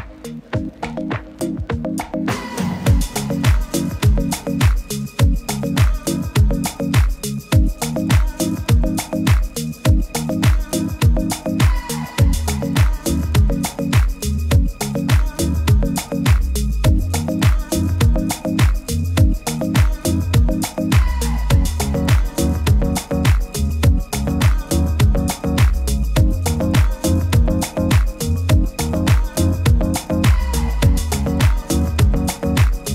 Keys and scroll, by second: 1.2 super++, 1.4 super++.